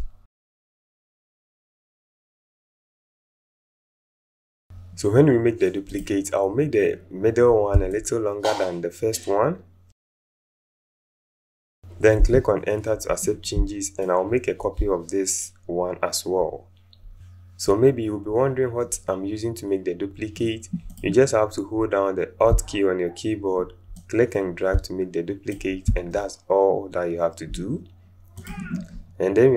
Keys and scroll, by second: 1.9 Up, 2.4 Up, 2.5 Up, 12.1 Return.